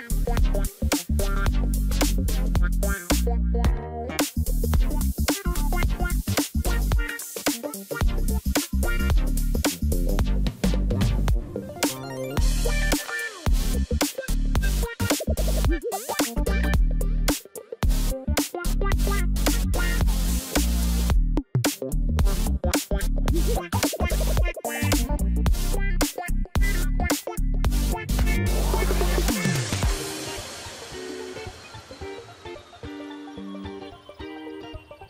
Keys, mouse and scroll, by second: 1.8 double click.